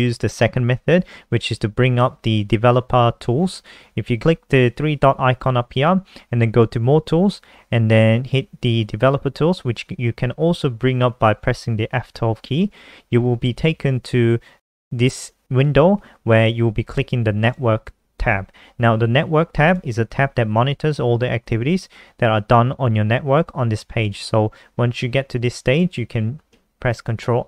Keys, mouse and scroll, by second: 27.1 ctrl+r.